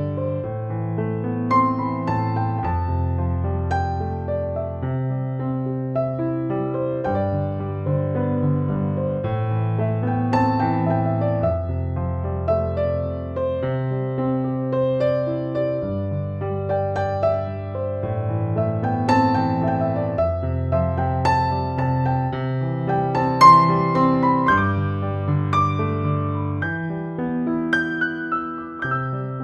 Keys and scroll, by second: 14.8 space.